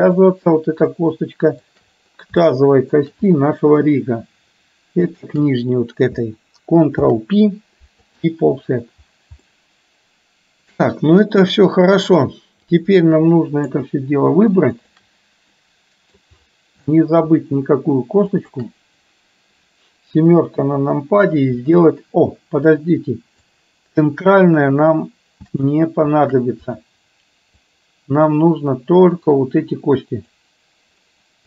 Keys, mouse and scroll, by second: 1.0 shift+middle click, 2.5 shift+middle click, 3.5 middle click, 5.2 shift+click, 7.1 ctrl+p, 9.5-12.2 middle drag, 12.7-13.9 drag, 14.7 shift+click, 15.6 middle click, 17.0 shift+middle click, 18.4 shift+click, 20.2 KP_7, 23.6-25.7 shift+drag, 26.7 click, 27.9-30.5 drag.